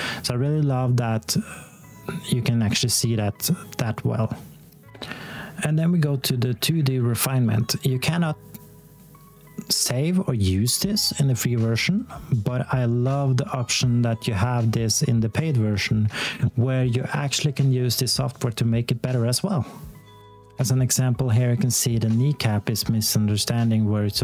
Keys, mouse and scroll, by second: 4.9 click, 20.3 click.